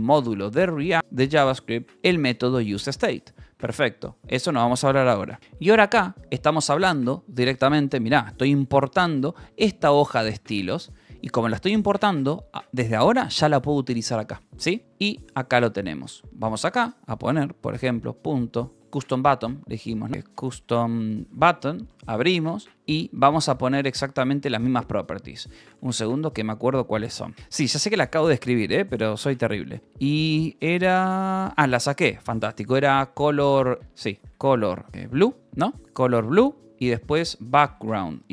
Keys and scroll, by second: 0.0-3.3 typing, 1.0 Escape, 3.2 Escape, 5.4 v, 6.0 e, 8.0 Escape, 9.8-10.8 typing, 11.2 Escape, 13.1-16.1 typing, 17.1-21.6 typing, 21.9 Return, 22.7 Escape, 22.9 :, 24.2 Return, 25.6-31.4 typing, 28.0 Return, 33.5-38.3 typing, 35.9 Return.